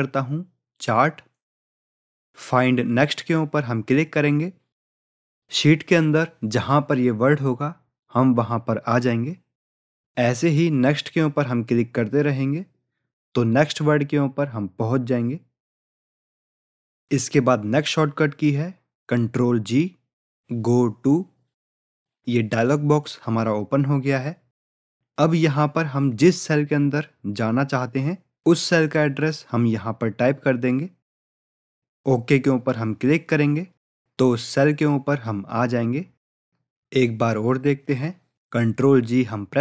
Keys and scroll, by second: 22.5 ctrl+g, 38.7 ctrl+g.